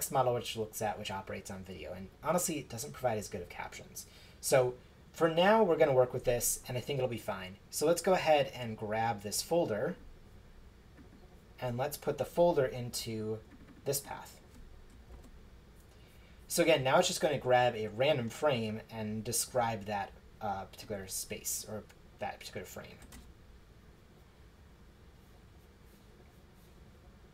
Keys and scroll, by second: 15.1 super+v, 23.0 shift+Return.